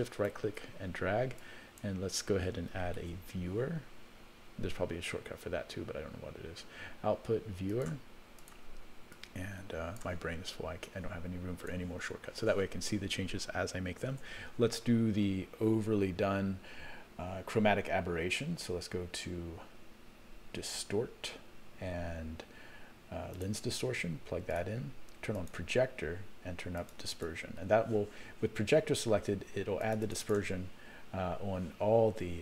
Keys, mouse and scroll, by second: 1.4-2.6 drag, 2.9 shift+a, 9.1 click, 10.9 click, 14.1 shift+a, 25.3 click, 26.8 click, 27.1 click, 29.8 click, 30.2 click, 31.2-31.6 scroll up 4.